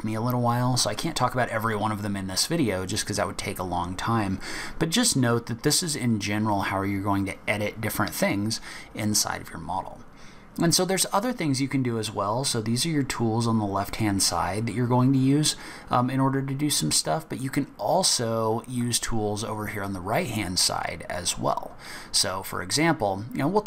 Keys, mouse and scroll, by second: 1.0 middle click, 1.6 scroll down 4, 2.3-4.1 scroll up 2, 17.3 click.